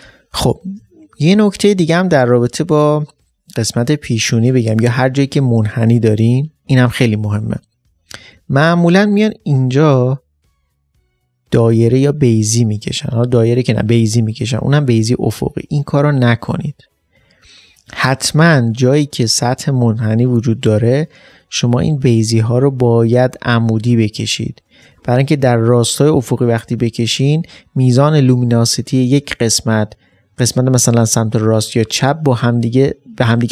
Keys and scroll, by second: 8.3 ctrl+space, 17.8 ctrl+space, 18.2 ctrl+d, 18.6 space.